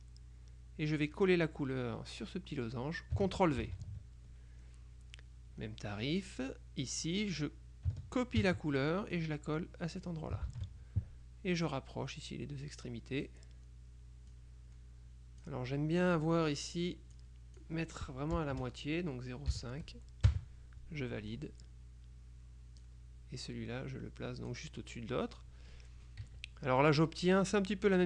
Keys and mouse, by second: 1.3 click, 3.7 ctrl+c, 7.1 click, 8.6 ctrl+c, 10.2 click, 10.6 ctrl+v, 11.8-13.8 drag, 14.4-16.0 drag, 17.2 click, 18.5 BackSpace, 19.6 KP_5, 20.4 KP_Enter, 23.0-25.1 drag, 26.4 KP_Subtract, 27.4 click.